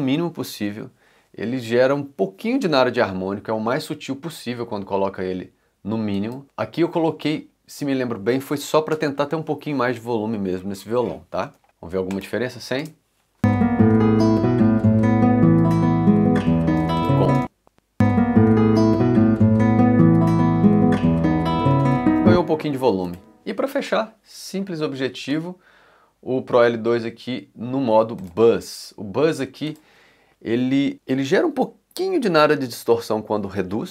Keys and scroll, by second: 12.8 space, 16.8 space, 21.7 space, 22.1 c.